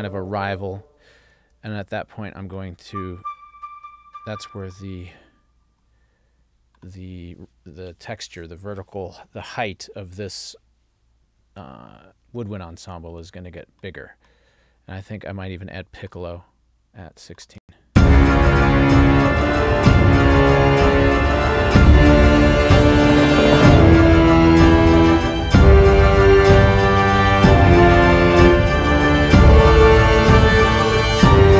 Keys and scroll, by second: 17.7 space.